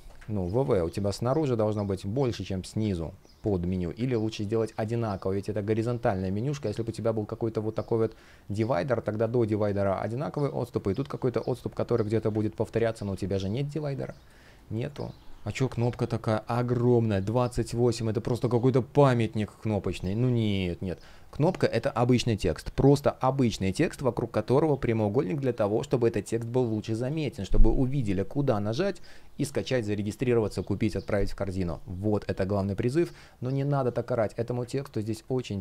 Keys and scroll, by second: 0.1 super+z, 4.4 super+z, 12.2 super+z, 13.9 space, 17.5 F1, 22.4 F1.